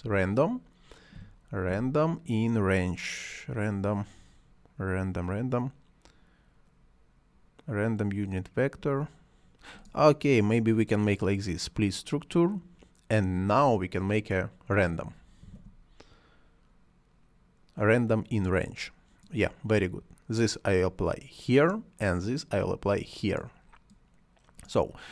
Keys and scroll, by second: 1.1 n, 15.0-16.0 typing.